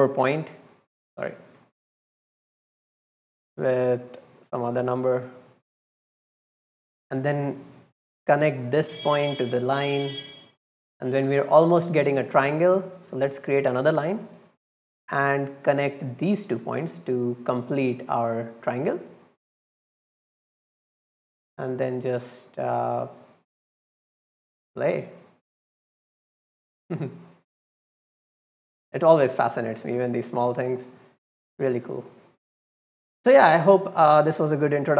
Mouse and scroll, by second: 0.9 click, 1.9-2.4 drag, 3.2 click, 4.0-4.5 drag, 7.9-9.4 drag, 10.2-10.8 drag, 11.0 click, 12.0 middle click, 12.3 right click, 12.7-13.1 middle drag, 13.1 drag, 14.4-14.9 drag, 15.7 click, 17.1 middle click, 17.5 click, 17.8 click, 19.6 right click, 20.2-20.6 drag, 21.3 click, 21.5 click, 21.6 click, 21.8 click, 22.6 click, 22.9 click, 23.1 click, 24.0 click, 24.1 click, 24.3 click, 24.5 click, 24.6 click, 24.8 click, 25.0 click, 25.7 click, 25.9 click, 26.0 click, 26.2 click, 26.3 click, 26.6 click, 27.6 click, 27.7 click, 28.0 click, 28.2 click, 28.4 click, 28.5 click, 28.7 click, 28.9 click, 29.0 click, 29.2 click, 29.4 click, 29.5 click, 30.4 click, 30.5 click, 30.7 click, 30.8 click, 31.5 middle click, 31.9 middle drag, 32.1 middle click, 32.4 middle click, 32.9 middle click, 33.5 middle drag, 33.7 right click, 34.2 middle click.